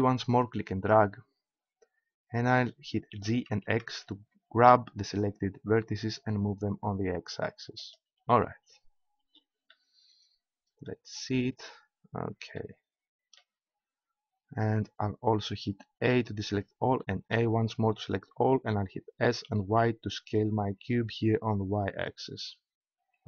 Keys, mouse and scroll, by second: 3.1 g, 8.3 click, 9.6 middle click, 16.0 a, 17.3 a, 19.1 s, 22.2-23.2 drag.